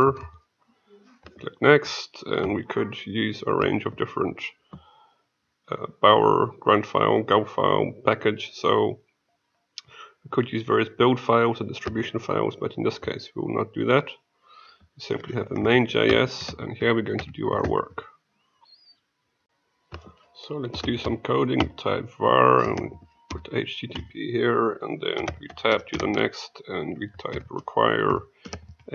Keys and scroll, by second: 16.4 ctrl+a, 19.4 ctrl+e.